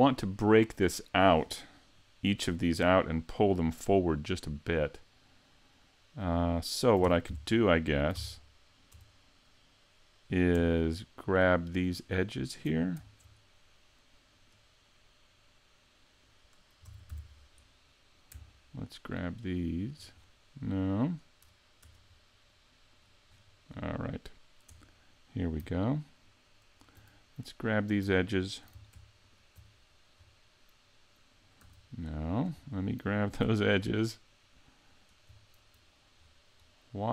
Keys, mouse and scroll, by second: 2.3-3.0 scroll up 5, 3.0 shift+middle click, 4.1-5.5 scroll down 1, 7.1 ctrl+Tab, 7.3 2, 8.2 ctrl+Tab, 9.0 Tab, 11.2 alt+right click, 12.0 alt+right click, 14.4 right click, 15.5 middle click, 16.9 ctrl+Tab, 17.7 middle click, 19.0 alt+right click, 19.7 alt+right click, 20.2 scroll down 5, 20.7 middle click, 21.8 Tab, 22.1-22.5 scroll down 2, 22.5 middle click, 23.0 right click, 23.4-23.9 scroll up 9, 24.7 Tab, 26.3 alt+right click, 27.1 middle click, 29.3 alt+shift+right click, 29.7 scroll down 1, 30.2 scroll up 3, 30.6 middle click, 31.7 a, 31.8-32.6 scroll down 4, 32.2 middle click, 32.6 scroll up 2, 33.8 alt+shift+right click, 34.9 alt+shift+right click, 36.2-36.7 scroll down 2, 36.7 middle click.